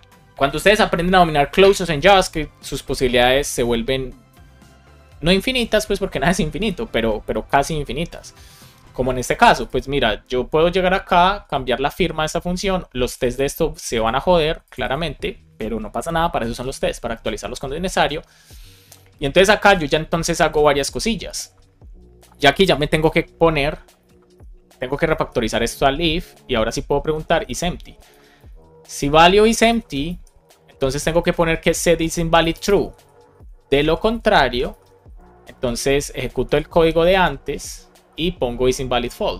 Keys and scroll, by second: 16.4 super+c, 22.5 Return, 24.4 BackSpace, 25.1 shift+9, 27.9 Return, 28.3 shift+9, 29.4 Right, 29.8 space, 30.0 shift+[, 30.3 Return, 30.8 super+v, 31.2 shift+9, 32.9 Right, 33.2 Down, 33.6 space, 34.7 shift+[, 35.0 Return, 35.5 Down, 36.1 super+Right, 36.3 shift+super+Left, 36.6 super+x, 36.8 super+Up.